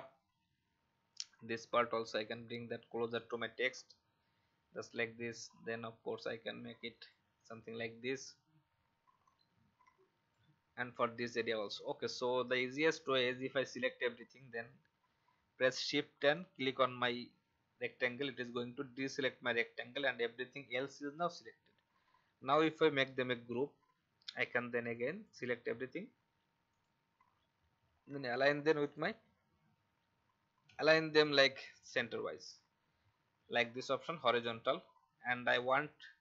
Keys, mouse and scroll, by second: 1.3-2.6 drag, 3.7 alt+scroll up 1, 6.2-10.8 drag, 11.1 alt+scroll down 1, 11.8 click, 12.2-12.8 alt+scroll down 1, 12.8-13.8 drag, 16.2 shift+click, 18.9 alt+scroll up 1, 23.3 ctrl+g, 24.9 click, 30.5 ctrl+z, 31.2 click.